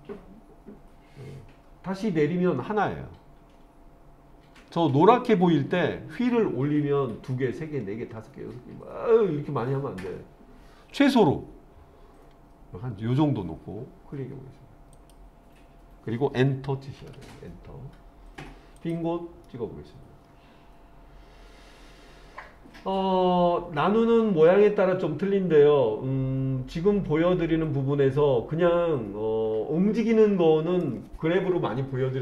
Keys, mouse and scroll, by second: 17.0 Return, 18.8 click, 19.5-30.8 middle drag.